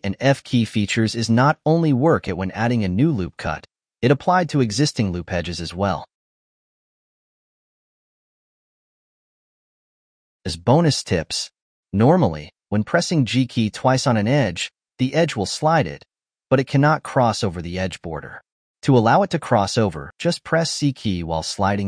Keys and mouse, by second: 0.1 click, 0.3-2.1 shift+middle drag, 2.1 click, 4.9 alt+shift+click, 5.9 g, 11.5-13.7 shift+middle drag, 13.7 click, 14.0 g.